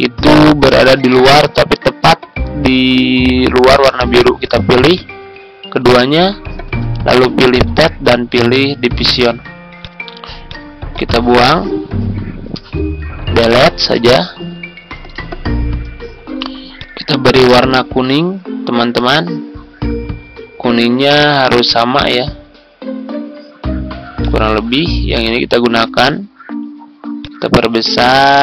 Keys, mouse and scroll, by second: 4.3 shift+click, 4.9 click, 5.6 ctrl+z, 6.3-7.5 ctrl+scroll down 1, 7.5 click, 13.8 Delete, 14.6 Tab, 16.7 click.